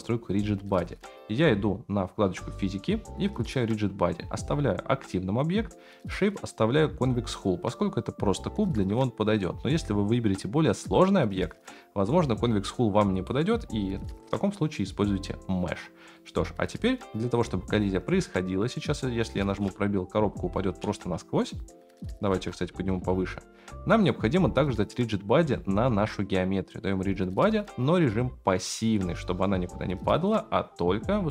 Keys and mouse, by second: 2.3 click, 3.4 click, 13.2-15.9 drag, 16.1 click, 18.9 click, 19.6 space, 21.1 space, 21.6 click, 22.3 g, 23.9 click, 25.5-25.9 shift+middle drag, 26.9-28.0 drag, 28.0-29.0 middle drag.